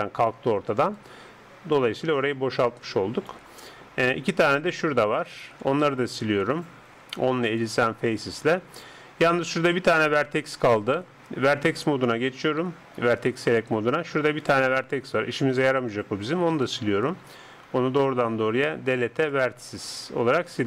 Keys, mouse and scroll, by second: 1.0 right click, 1.0-3.5 d, 4.3-7.0 right drag, 6.2 x, 11.6-13.4 drag, 14.4 right click, 16.7 x.